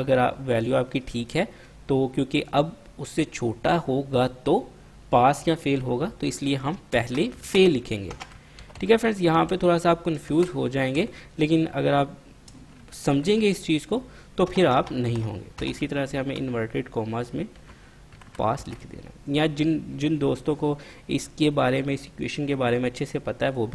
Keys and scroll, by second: 7.1-8.9 typing, 10.1-11.1 typing, 12.5-13.3 typing, 14.6-16.3 typing, 17.5-18.7 typing.